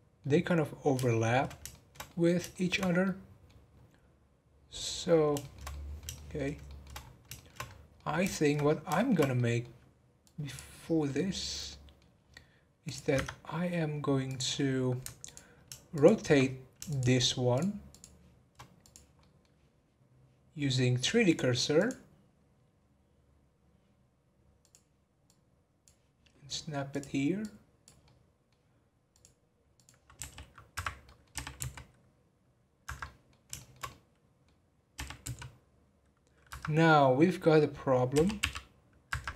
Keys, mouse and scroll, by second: 0.3-0.7 scroll down 3, 1.1-2.8 shift+middle drag, 2.8 scroll up 1, 3.0-3.5 middle drag, 3.5 scroll up 2, 4.9 scroll down 3, 5.4-6.9 shift+middle drag, 6.9 scroll up 4, 7.3 shift+middle drag, 7.6 scroll up 1, 7.9-8.6 middle drag, 8.6 scroll up 1, 8.9-10.2 shift+middle drag, 10.2 click, 11.0-12.1 middle drag, 12.1-12.8 scroll down 2, 12.8 click, 14.2 click, 14.5-15.2 scroll up 4, 15.2 alt+click, 15.9 alt+shift+click, 16.9 shift+click, 17.5 shift+click, 17.9 shift+click, 18.8 click, 19.1 scroll up 1, 19.2-21.2 middle drag, 21.2-24.4 drag, 25.2-27.0 drag, 27.4 click, 28.0-29.1 middle drag, 29.1-30.2 drag, 30.2 r, 31.0 middle click, 31.3 r, 33.0-34.9 middle drag, 34.9 r, 36.8-38.1 middle drag, 38.1 r.